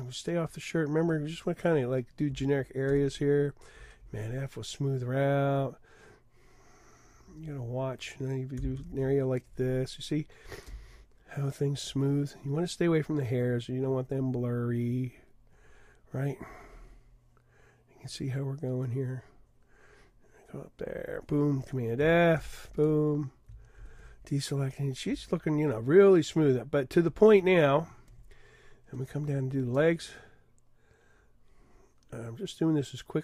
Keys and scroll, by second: 2.9 super+f, 8.8 super+f, 22.4 super+f, 23.8 super+d.